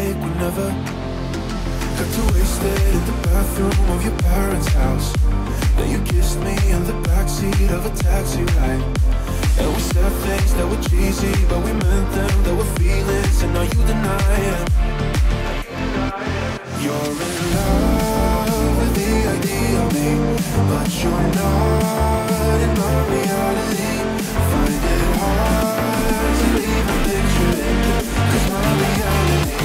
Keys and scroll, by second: 19.6 ctrl+t.